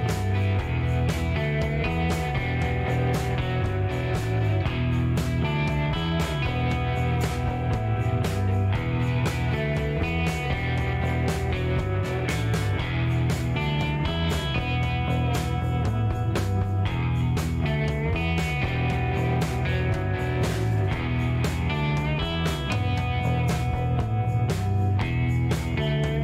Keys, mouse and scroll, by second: 0.8 click, 1.9 click, 3.3 click, 5.4 click, 6.3 middle click, 8.9 middle click, 10.0 click, 10.7 click, 11.2 scroll up 1, 11.7 middle click, 12.0 scroll down 1, 12.5 middle click, 14.3 click, 15.0 click, 15.8 scroll up 1, 16.4 middle click, 18.9 click, 20.3 click, 21.2 click, 21.9 click, 22.2 right click, 24.2 click, 25.4 click, 26.1 5.